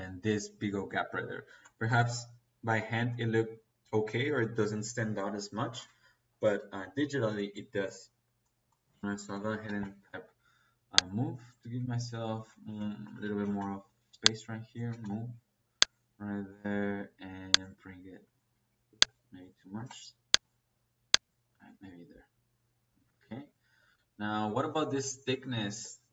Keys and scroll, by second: 8.7 Escape, 9.2 m, 9.5 o, 9.6 e, 9.7 space, 11.6 Escape, 12.6 Escape, 12.9-13.5 typing, 14.8 space, 17.6 Escape, 19.7 space, 21.5 Escape.